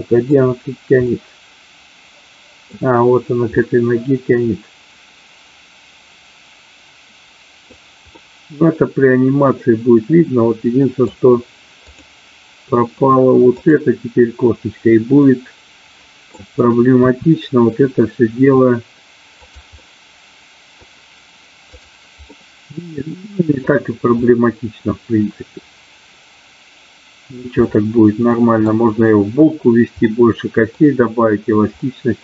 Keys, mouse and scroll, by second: 1.0-2.7 middle drag, 3.5-7.7 middle drag, 8.1-11.1 middle drag, 11.9 click, 13.5-14.7 drag, 15.2-16.4 middle drag, 17.0 r, 19.4 click, 19.7-20.7 middle drag, 22.4-23.6 middle drag, 24.4-27.4 middle drag, 28.2 middle click, 30.1 middle click.